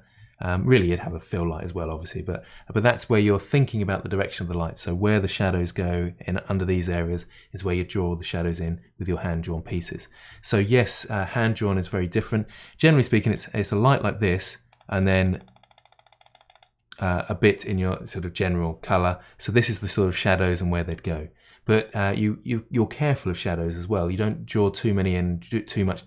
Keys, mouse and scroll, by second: 14.7-16.8 drag.